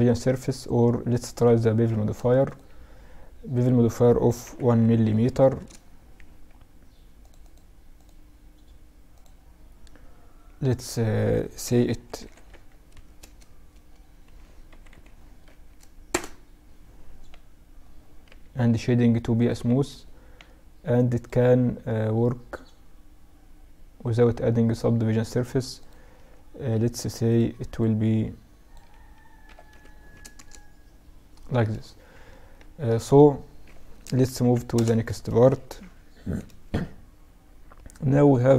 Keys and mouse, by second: 1.2 ctrl+a, 2.6-4.3 drag, 4.0 0, 6.2-11.6 drag, 11.2 KP_0, 13.9 KP_0, 17.3 t, 18.3-22.1 drag, 18.7 t, 24.8-28.4 drag, 31.5-33.6 middle drag, 32.6 g, 34.7 KP_Subtract, 36.8 middle click, 38.2-38.5 right drag.